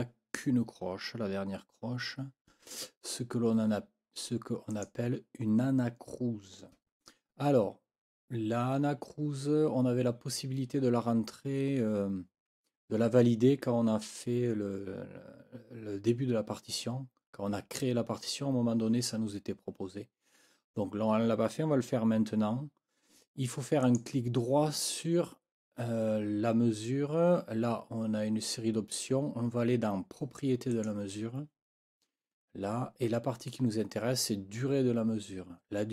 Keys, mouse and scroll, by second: 4.7 click, 23.9 right click, 30.7 click.